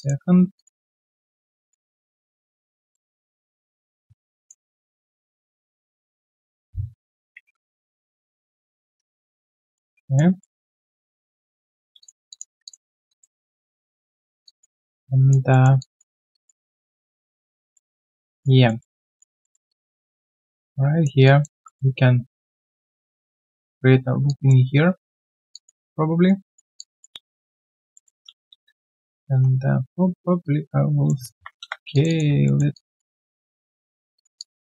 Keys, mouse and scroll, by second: 7.3 ctrl+Delete, 8.9 alt+right click, 9.2 alt+click, 10.4 alt+middle click, 10.6 alt+right click, 10.8 alt+click, 11.1 alt+middle click, 11.4 right click, 11.8 right click, 12.3 alt+click, 12.6 alt+click, 12.8 alt+scroll down 1, 13.0 alt+click, 13.3 alt+right click, 13.8 alt+middle click, 14.4 alt+click, 14.7 alt+right click, 15.0 alt+click, 15.5 alt+middle click, 15.8 alt+click, 17.7 alt+middle click, 18.1 alt+click, 18.6 alt+middle click, 18.9 alt+click, 19.4 alt+middle click, 19.7 alt+click, 21.2 alt+click, 21.6 alt+middle click, 24.1 alt+middle click, 24.2 alt+click, 24.7 alt+right click, 25.5 alt+click, 25.9 right click, 26.7 alt+click, 27.5 shift+click, 27.9 alt+middle click, 28.2 right click, 28.2 q, 28.9 double click, 29.2 w, 31.9 shift+click, 32.0 shift+double click, 32.4 alt+middle click, 33.1 alt+middle click, 34.0 shift+click, 34.3 alt+click.